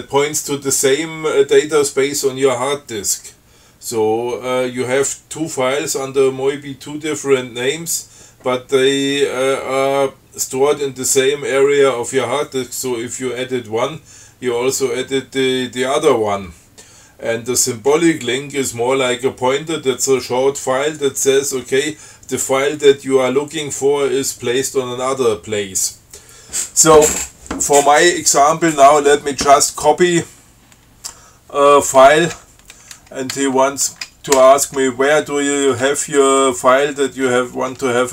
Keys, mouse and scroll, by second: 32.6 c, 33.6 BackSpace.